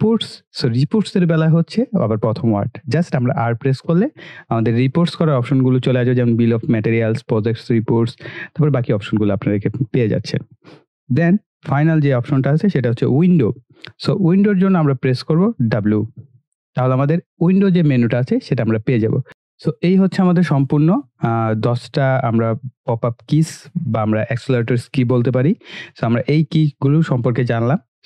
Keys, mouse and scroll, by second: 3.9 r, 10.6 click, 16.0 w, 18.8 click.